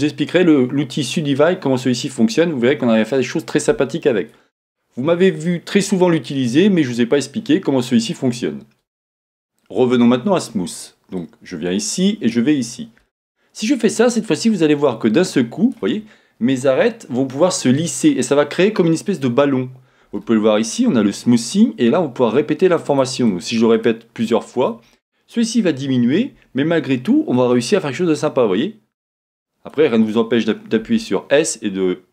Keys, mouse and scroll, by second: 11.1-14.2 drag, 22.9-26.6 drag, 27.4-32.1 drag, 30.8 s.